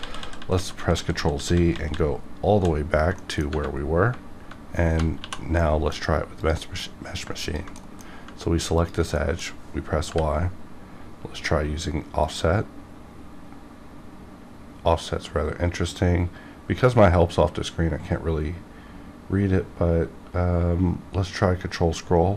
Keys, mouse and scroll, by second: 3.1 ctrl+z, 3.2 middle click, 3.8 scroll up 1, 5.2 2, 5.6 middle click, 6.4 click, 7.3 ctrl+click, 7.7 middle click, 8.8 ctrl+click, 9.1 middle click, 9.6 scroll up 1, 10.1 y, 12.2 click, 22.2-22.3 scroll up 1.